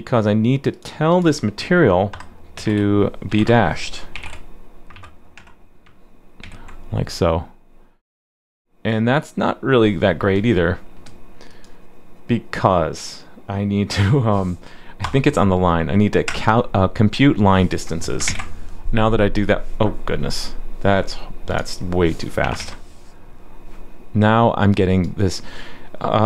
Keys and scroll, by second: 6.4 super+s, 18.3 super+s, 22.6 super+s.